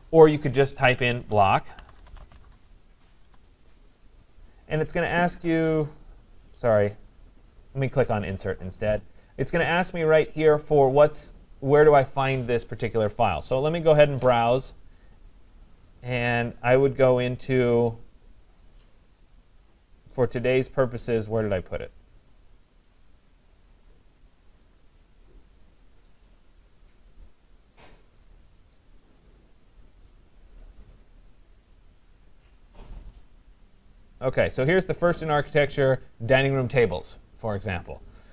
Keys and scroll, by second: 3.1 Return.